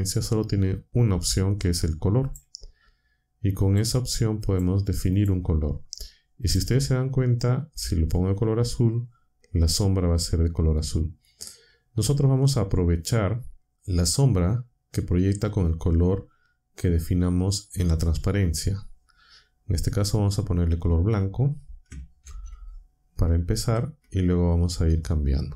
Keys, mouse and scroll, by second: 2.3 click, 3.6 click, 4.4 click, 5.1 click, 6.4 click, 22.2 c, 23.6 ctrl+v.